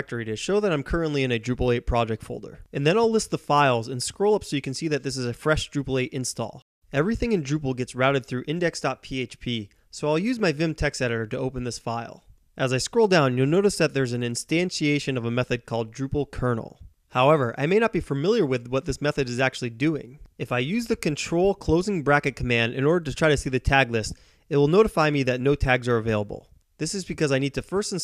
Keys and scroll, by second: 0.9-1.6 typing, 2.8 ctrl+b, 3.5 [, 4.0 Up, 4.5 Up, 4.6 Up, 4.7 Up, 4.8 Up, 5.4-8.4 Up, 6.6 typing, 8.0-10.9 typing, 10.9 Return, 12.9-18.1 typing, 19.6 ctrl+], 19.6 typing, 25.7 Return, 26.4-28.0 typing.